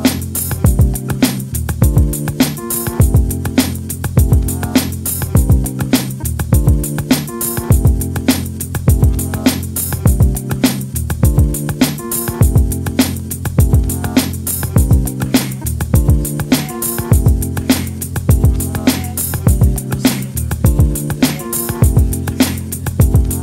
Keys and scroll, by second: 8.2 shift+space, 22.5-23.0 typing.